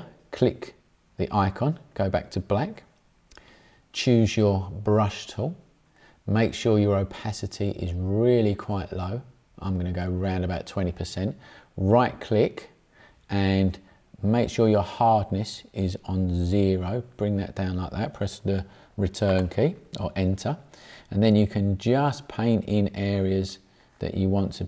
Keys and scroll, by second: 19.2 Return.